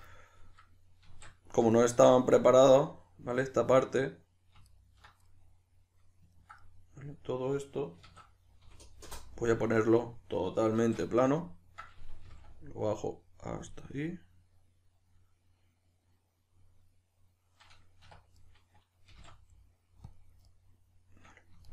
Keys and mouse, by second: 1.1 alt+q, 4.6 alt+right click, 5.3-13.7 middle drag, 8.0 s, 10.8 alt+q, 12.3 g, 13.7 click, 13.8-18.4 middle drag, 18.4 right click, 19.1 g, 20.2 click, 20.4-21.7 middle drag.